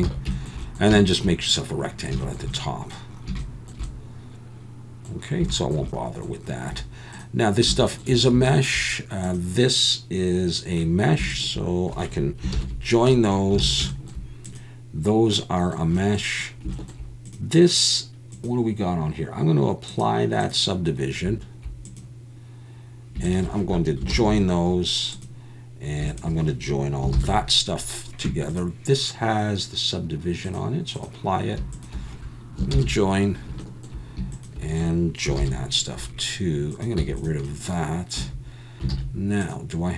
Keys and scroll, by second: 0.1 alt+a, 12.6 ctrl+j, 13.6 alt+a, 24.1 ctrl+j, 32.7 ctrl+j, 35.4 ctrl+j, 37.0 x, 38.2 a, 38.9 alt+a.